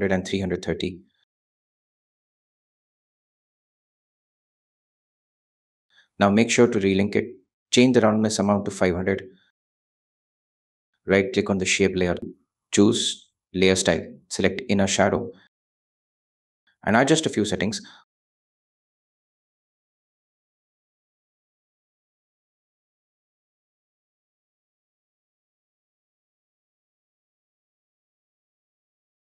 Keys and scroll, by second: 0.1 shift+8, 0.5 shift+0, 4.0 shift+3, 4.7 0, 5.0 Home, 8.7 5, 8.9 0, 9.7 Home, 25.7 5, 26.5 Home.